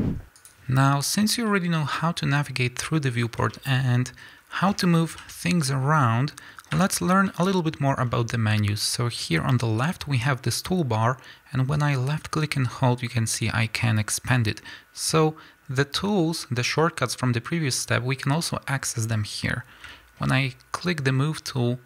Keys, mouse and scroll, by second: 0.4 click, 1.5-11.7 middle drag, 5.2 g, 6.8 Escape, 11.7-17.9 drag, 19.4 scroll up 1, 19.9-21.8 shift+middle drag.